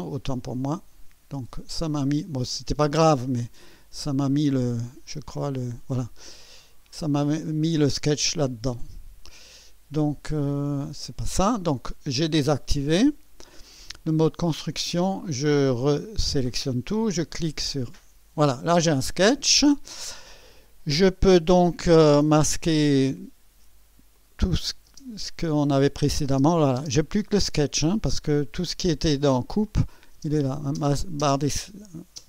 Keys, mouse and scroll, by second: 0.5 click, 2.0 click, 3.4 click, 4.8 click, 5.5 click, 7.4 click, 17.7 click, 24.1 click, 24.9 space, 25.8 click, 26.3 space, 29.7 click, 30.1 space, 31.8 space.